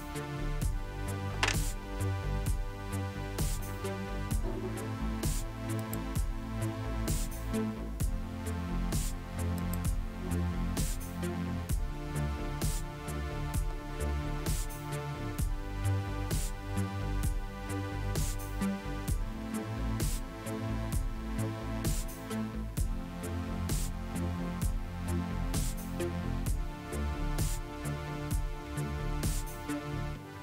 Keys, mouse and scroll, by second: 5.8 click, 9.6 click.